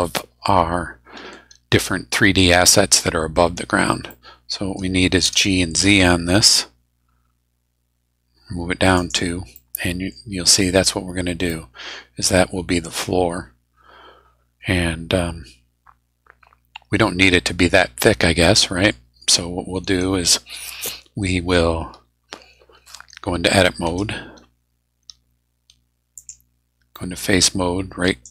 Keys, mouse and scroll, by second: 4.1 middle click, 5.2 g, 6.8 z, 9.0 click, 9.5 click, 10.5-11.2 scroll up 4, 11.5-19.0 drag, 19.0 middle click, 19.0-19.3 scroll down 2, 19.8 scroll up 2, 23.9 Tab, 26.2 click, 27.0 middle click, 28.0 right click.